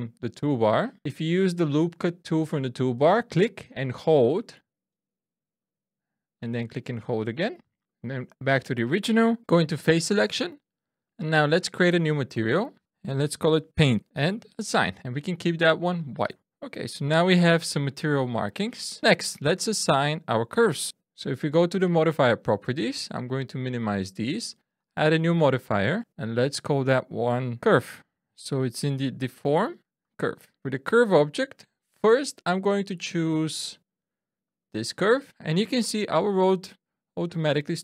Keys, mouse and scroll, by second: 0.7 click, 3.3 click, 6.3 click, 11.0 click, 12.7 click, 12.8 click, 14.3 click, 16.2 Tab, 21.7 click, 22.9 click, 23.7 click, 24.7 click, 32.8 click.